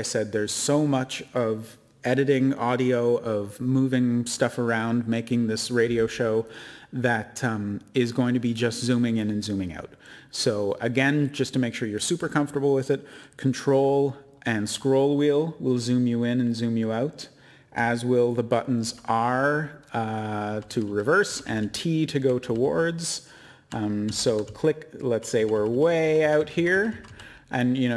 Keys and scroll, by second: 18.7 typing, 20.6-23.5 typing, 25.0-27.5 typing.